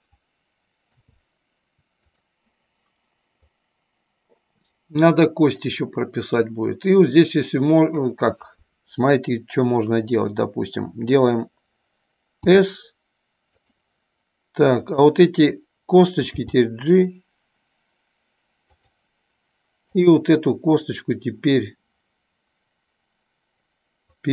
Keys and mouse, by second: 1.0 i, 3.5-8.0 drag, 12.4 s, 13.5 click, 14.9 click, 16.4 g, 18.8 click, 19.9 click, 24.2-24.3 drag.